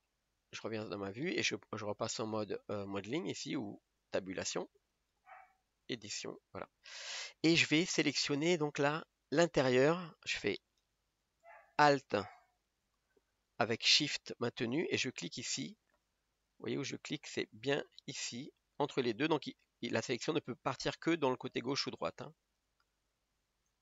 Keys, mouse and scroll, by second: 0.0 scroll down 3, 0.1-0.8 middle drag, 0.8-1.2 scroll up 7, 4.8-6.9 drag, 6.9-7.7 scroll down 2, 7.7 middle click, 8.3-8.7 scroll up 1, 8.7-14.3 shift+middle drag, 15.9-16.5 scroll up 1, 16.5-22.4 shift+middle drag, 22.4-23.8 alt+shift+right drag.